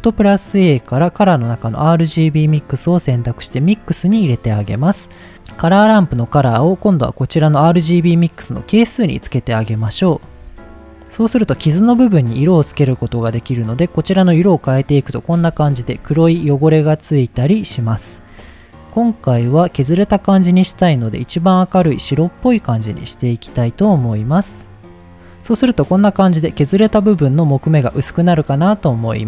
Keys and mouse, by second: 4.1 middle click, 5.3-7.8 drag, 12.4 click, 15.7 shift+middle click, 17.4 click, 23.5-23.9 middle drag, 24.3 shift+middle click.